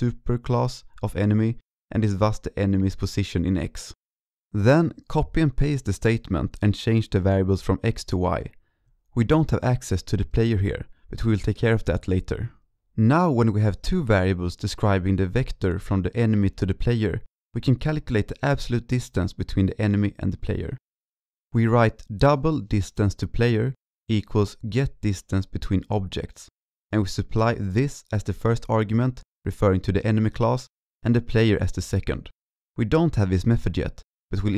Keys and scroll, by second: 0.2 ctrl+c, 0.4 ctrl+v, 0.6 ctrl+v, 11.8 ctrl+s.